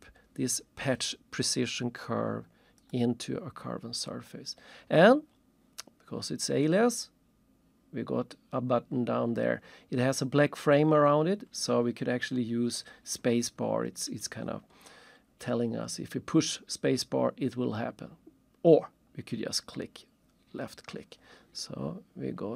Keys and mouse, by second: 2.8 click, 19.6 click.